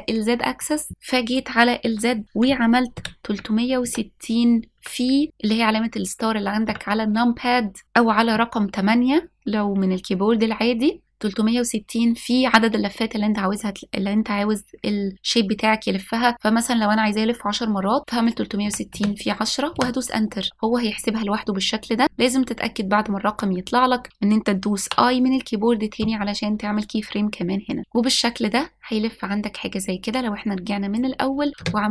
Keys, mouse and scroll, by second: 28.9-31.9 drag.